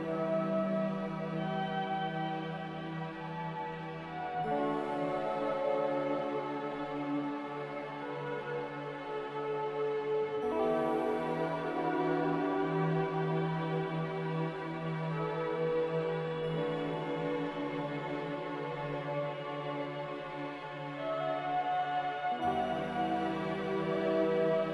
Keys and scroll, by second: 0.1 typing, 0.9 Return, 2.7-4.4 typing, 3.0 Return, 5.2 Delete, 6.1 b, 14.7-18.6 typing, 21.3-24.7 typing.